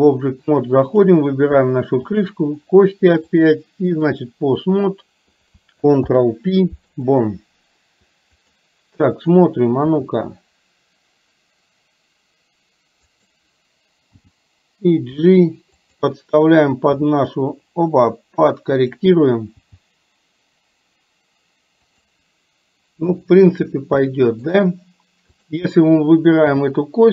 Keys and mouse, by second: 1.0 click, 2.2 shift+click, 3.4 click, 4.8 click, 6.0 ctrl+p, 8.5 click, 9.9 r, 14.3 g, 17.0 r, 19.5 g, 24.2 shift+middle click, 25.3 click, 26.5 g.